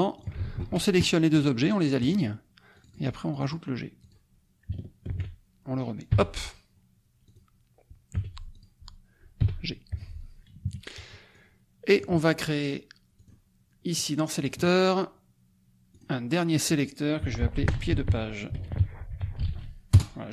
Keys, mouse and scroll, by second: 0.1 ctrl+shift+click, 0.5 ctrl+shift+a, 2.0 click, 2.7 click, 3.3 click, 4.1 click, 5.2 ctrl+g, 6.1 g, 7.4 click, 8.1 t, 8.5 click, 9.3 g, 9.9 F1, 10.6 KP_Subtract, 11.3 click, 13.1 click, 14.3 click, 15.9 click, 17.1-19.8 typing, 19.9 Return.